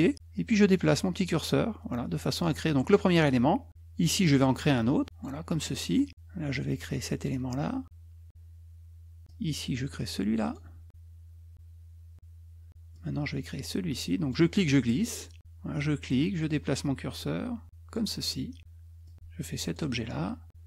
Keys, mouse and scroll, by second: 2.7 click, 5.0 click, 7.5 click, 10.7 click, 20.2 click.